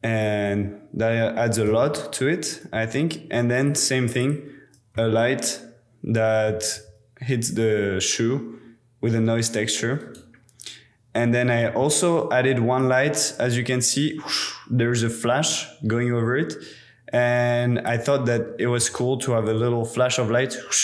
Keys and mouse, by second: 1.9 super+z, 4.2 click, 4.9-6.6 drag, 6.7 g, 10.0 click, 11.6 middle click, 12.8-13.4 middle drag, 17.9 middle click, 18.8 KP_0, 19.4 space.